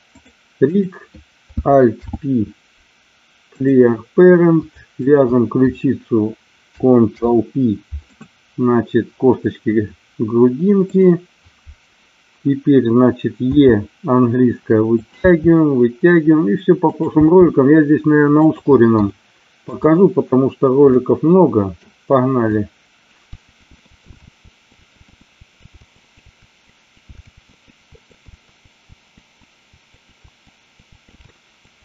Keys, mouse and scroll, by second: 0.1 click, 0.8 click, 1.9 alt+p, 7.1 ctrl+p, 10.8 click, 13.4 e, 14.8 click, 15.2 e, 16.8 click, 17.1 e, 18.4 click, 19.0 shift+middle click, 21.0 middle click, 22.3 click, 23.3 g, 23.6 click, 23.8 middle click, 23.9 e, 24.0 click, 24.4 ctrl+z, 24.4 g, 24.9 middle click, 25.1 click, 25.8 g, 25.9 click, 26.4 e, 27.0 click, 27.3 alt+p, 27.9-30.9 typing, 28.1 click, 28.1 middle click, 28.6 click, 30.1 click, 30.4 click, 31.0 click, 31.7 click.